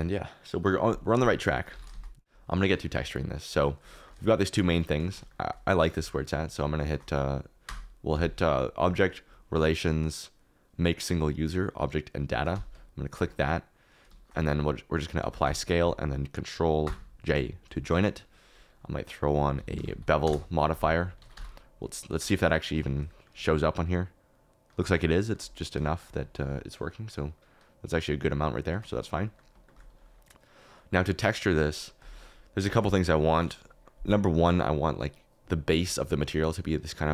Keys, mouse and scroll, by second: 1.4 shift+middle click, 1.7 alt+d, 1.9 shift+z, 2.3 g, 2.7 shift+middle click, 3.9 shift+middle click, 4.2 shift+middle click, 4.7 scroll up 1, 5.2 shift+middle click, 6.0 shift+middle click, 6.7 shift+middle click, 7.6 q, 8.8-10.7 drag, 15.1 ctrl+a, 16.8 ctrl+j, 21.2 ctrl+a, 21.7 a, 22.6 shift+middle click, 23.0 middle click, 23.2 shift+middle click, 26.0-29.0 shift+middle drag, 29.2 click, 36.7-37.1 drag.